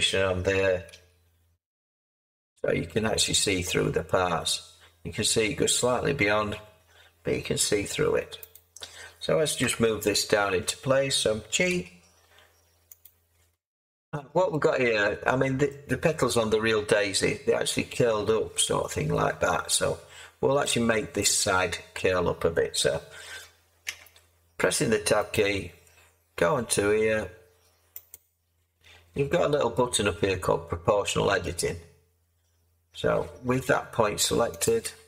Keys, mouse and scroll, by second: 0.9 g, 9.6 7, 11.7 g, 23.8 Tab.